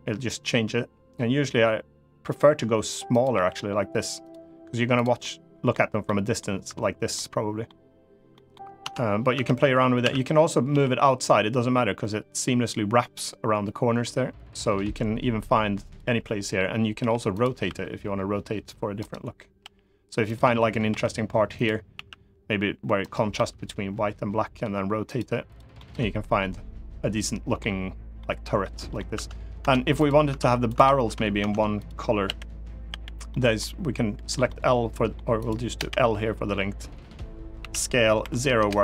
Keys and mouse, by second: 2.8 click, 3.0 g, 3.9 click, 4.9 middle click, 5.8 middle click, 6.8 middle click, 8.0 middle click, 8.5 Tab, 9.1 Tab, 9.7 a, 10.4 g, 15.5 click, 16.7 g, 17.0 click, 17.4 r, 18.7 middle click, 19.3 g, 20.0 click, 20.7 g, 21.2 click, 21.6 s, 22.7 right click, 23.0 r, 24.8 click, 25.5-27.3 middle drag, 27.9 middle click, 28.8 Tab, 29.3 Tab, 29.7 click, 30.0 Tab, 30.4 click, 30.5 Tab, 30.8 Tab, 31.1 Tab, 31.5 click, 32.0 l, 32.6 l, 33.0 middle click, 33.9 l, 34.2 middle click, 35.1 click, 35.5 l, 37.3 s, 37.9 0, 38.3 Return.